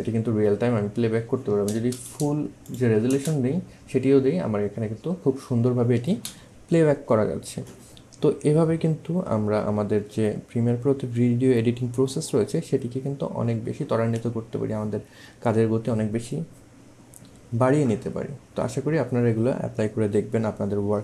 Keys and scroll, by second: 1.7 space, 6.1 space.